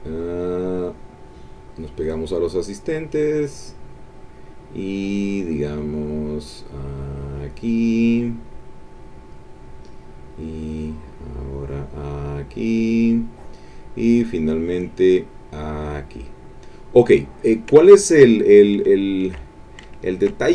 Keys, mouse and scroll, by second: 0.4-2.2 drag, 6.6-9.5 drag, 10.8-13.7 drag, 14.5-16.3 drag, 16.5 middle click, 16.8 click, 17.8 ctrl+middle click, 18.1 ctrl+click, 18.4 ctrl+click, 19.0 ctrl+click, 19.9 ctrl+click, 20.0 ctrl+middle click.